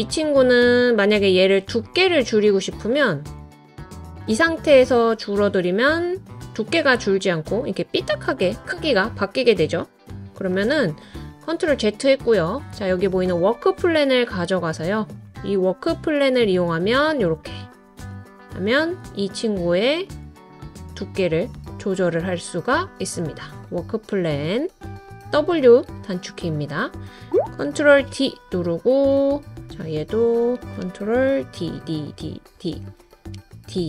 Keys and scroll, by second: 10.5 super+z, 27.3 ctrl+d, 27.9 super+d, 31.4 super+d, 31.7 super+d, 32.1 super+d, 33.7 super+d.